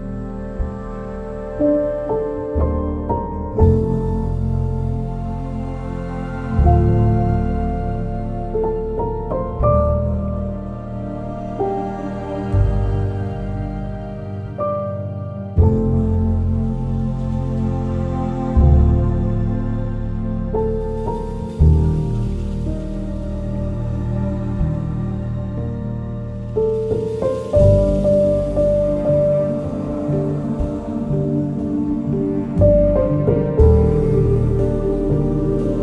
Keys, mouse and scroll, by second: 0.6 click, 11.4-12.6 typing, 13.2 click, 14.8 scroll up 1, 15.8 scroll down 1, 19.1-19.5 scroll up 1, 19.5 click, 20.1 ctrl+s, 20.3 right click, 20.8 scroll up 1, 21.0 scroll down 1, 21.1-22.8 right drag, 22.8 scroll down 1, 23.6-25.7 drag, 26.5 click, 29.2 click, 31.4-34.3 drag, 34.3 scroll up 1, 34.7 click, 34.9 scroll down 1, 35.2 right click, 35.5 scroll up 1.